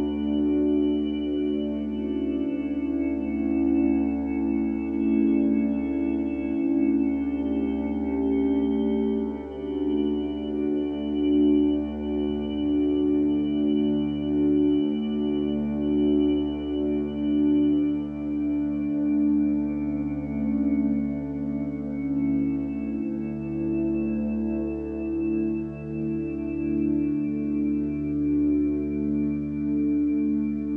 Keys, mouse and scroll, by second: 9.8 ctrl+z, 10.0 ctrl+z, 10.5 ctrl+z, 18.8 ctrl+j, 25.3 ctrl+t.